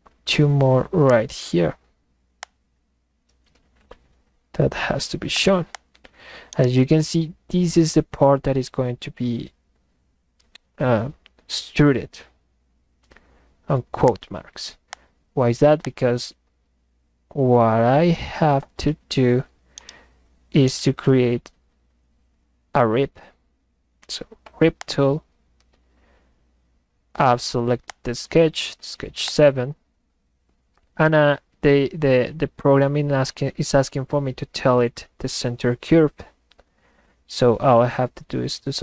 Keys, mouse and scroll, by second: 1.1 click, 2.4 click, 5.3 click, 5.7 click, 6.4-7.2 middle drag, 6.5 right click, 14.1 click, 14.9 click, 15.8 click, 19.6-20.2 middle drag, 19.8 right drag, 20.6 middle click, 20.8 right click, 24.8 click, 27.9 click, 29.3-38.8 drag.